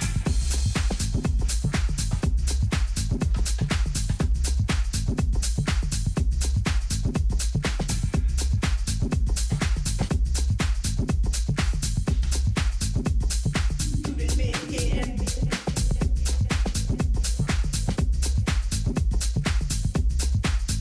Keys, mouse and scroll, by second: 0.9 KP_7, 2.0-4.7 middle drag, 4.7-8.7 drag, 10.3-12.3 drag, 14.5 g.